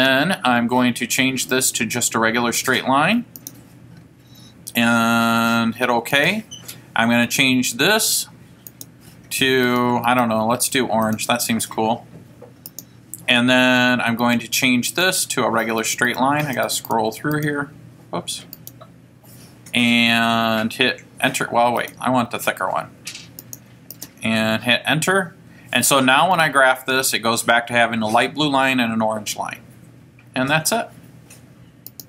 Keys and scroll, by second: 0.1 Return, 1.7 Left, 3.5 Return, 6.5 Return, 7.4 Down, 8.9 Return, 9.8 Right, 10.3 Right, 11.2 Left, 12.8 Return, 14.4 Right, 14.8-15.6 typing, 16.8 Right, 17.0 Right, 18.7 Left, 18.7 Right, 22.0 Right, 24.2 Return, 26.5 F5.